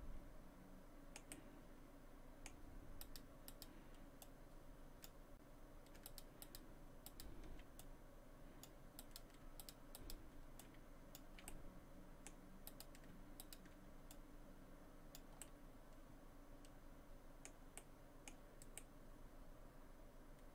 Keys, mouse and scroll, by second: 1.3 middle click, 3.0 right click, 3.5 right click, 4.2 click, 6.1 shift+right click, 6.4 shift+right click, 7.1 shift+right click, 7.8 click, 9.0 right click, 9.6 shift+right click, 10.0 shift+right click, 10.6 click, 11.5 middle click, 12.7 right click, 13.4 shift+right click, 14.1 click, 15.4 middle click, 17.8 middle click, 19.7 middle click.